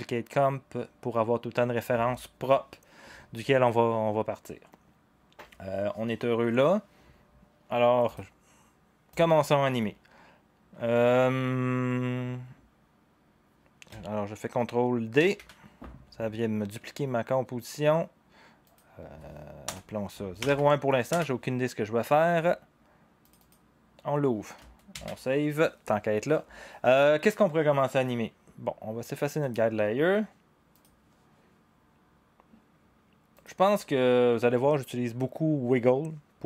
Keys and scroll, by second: 15.1 ctrl+d, 19.6 Return, 20.1-21.0 typing, 21.1 Return, 23.5-24.2 typing, 24.9 ctrl+s.